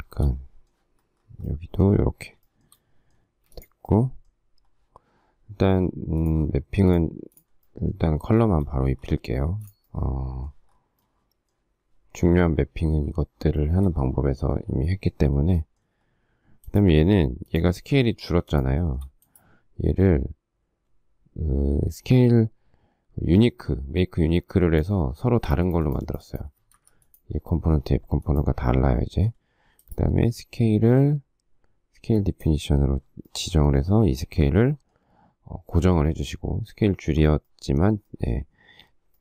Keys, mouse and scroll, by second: 0.0 shift+middle click, 2.4 shift+middle click, 3.2 space, 8.3 shift+middle click, 9.4 space, 13.5 shift+middle click, 18.8 shift+middle click, 18.9 shift+double middle click, 25.4 click, 26.8 Escape.